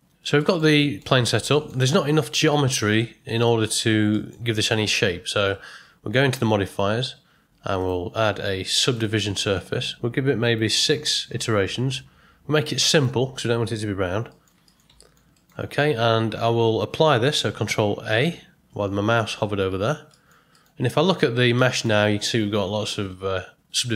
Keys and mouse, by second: 0.4 middle click, 0.7 ctrl+middle drag, 1.5 ctrl+middle click, 3.2 Tab, 4.1 middle click, 5.4 Tab, 7.9-9.0 drag, 10.4-12.1 drag, 12.9 click, 14.3 middle click, 14.6 ctrl+middle click, 15.0 shift+middle drag, 15.3 ctrl+middle click, 18.1 ctrl+a, 20.1 ctrl+middle click, 20.5 middle click, 20.9 Tab, 21.5 middle click.